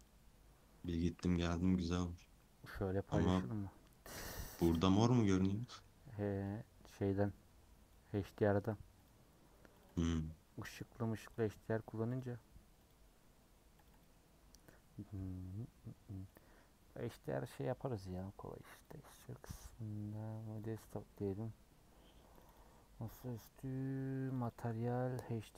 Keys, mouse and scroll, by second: 0.9 click, 1.1-2.2 middle drag, 2.2 scroll down 1, 2.3-6.6 middle drag, 6.6-12.2 drag, 12.9-14.6 drag, 14.6-16.4 middle drag, 16.4-25.5 drag.